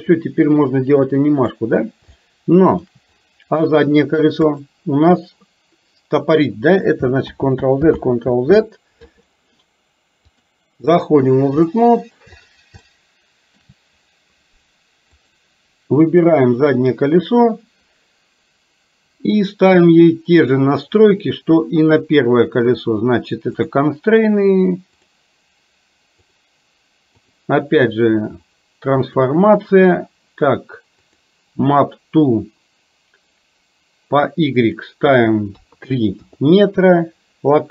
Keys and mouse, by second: 2.2 shift+middle click, 7.4 ctrl+z, 10.4 click, 11.7 shift+middle click, 12.8 shift+middle click, 15.2 click, 23.7 click, 27.3-29.3 drag, 34.8-36.3 drag.